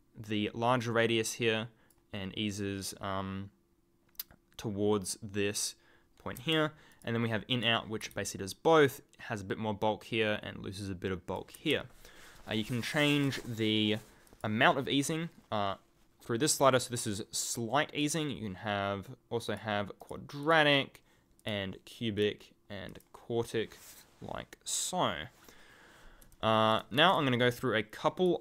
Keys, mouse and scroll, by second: 6.9 alt+click, 12.8 alt+click, 14.2 alt+click, 18.0 alt+click, 19.4 alt+click, 26.3 ctrl+alt+click, 26.4 ctrl+alt+scroll down 1, 26.6-27.1 ctrl+alt+scroll, 27.2 ctrl+click, 27.4-28.3 ctrl+scroll down 1.